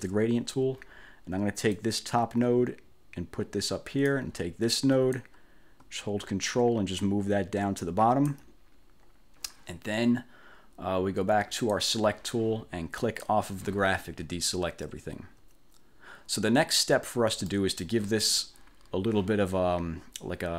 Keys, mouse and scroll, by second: 1.8-4.4 drag, 5.2-8.6 drag, 11.8 click, 13.1 click, 16.4-17.0 ctrl+scroll up 4, 17.6 ctrl+click.